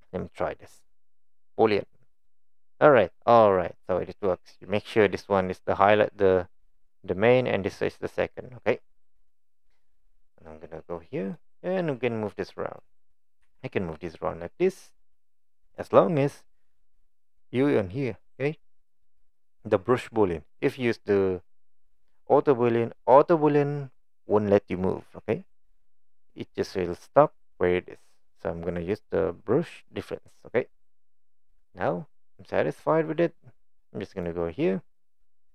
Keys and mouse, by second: 2.2-10.3 drag, 10.9-11.4 middle drag, 13.4 g, 31.8-32.9 middle drag.